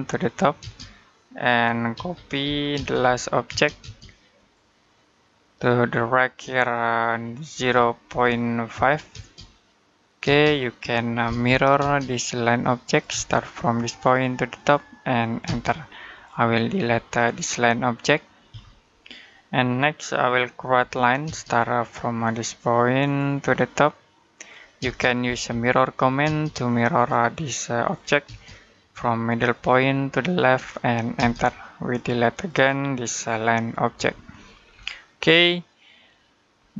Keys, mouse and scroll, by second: 0.4 space, 1.8-3.3 typing, 4.2 click, 7.4 typing, 8.5-8.9 typing, 11.1-11.6 typing, 12.7 click, 12.9 space, 13.7 click, 15.3 space, 15.9 click, 18.3 Delete, 20.6-21.1 typing, 22.8 click, 24.6-26.1 typing, 26.8 click, 28.1 space, 29.3 click, 31.0 space, 31.6 click, 33.8 Delete, 34.3 scroll down 1, 35.2 middle click, 36.4-36.7 scroll up 1.